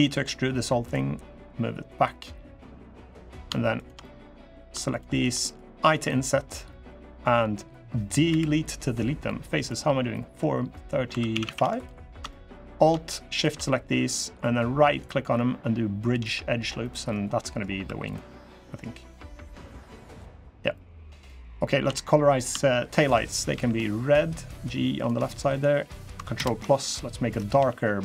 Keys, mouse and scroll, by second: 1.2 click, 1.9 middle click, 3.0 click, 3.5 shift+click, 3.8 middle click, 4.6 shift+click, 4.9 shift+click, 5.2 middle click, 5.6 i, 8.0 Delete, 9.9 middle click, 10.2 scroll up 1, 10.5 middle click, 10.8 2, 11.1 a, 11.2 a, 11.5 alt+shift+click, 12.0 middle click, 13.1 alt+shift+click, 13.4 middle click, 14.6 right click, 16.6 middle click, 17.1 middle click, 17.6 3, 17.8 click, 18.3 middle click, 19.0 middle click, 19.7 click, 20.3 click, 21.0 middle click, 21.6 a, 22.0 click, 22.6 shift+click, 23.3 g, 25.2 click, 26.1 ctrl+KP_Add, 27.3 g.